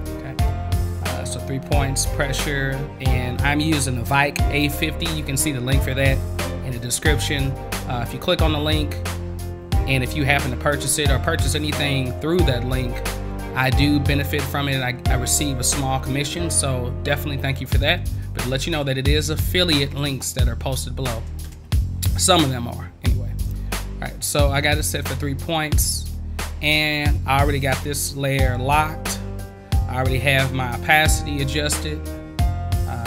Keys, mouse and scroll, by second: 21.4 space, 23.4 click.